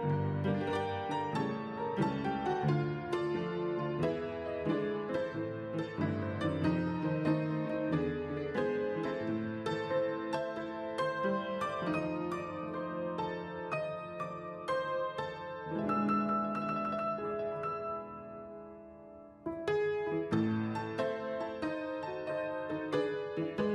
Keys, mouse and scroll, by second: 8.0 right click, 16.7 right click.